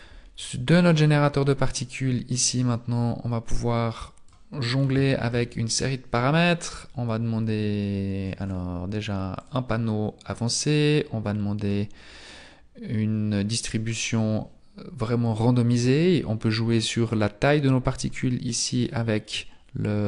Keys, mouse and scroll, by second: 0.4 right click, 4.0 click, 4.5-5.1 scroll down 3, 5.1 shift+middle click, 5.4-6.9 scroll down 2, 9.4 click, 9.4-10.3 scroll up 10, 10.3-13.4 scroll up 2, 14.0 click, 17.3 click.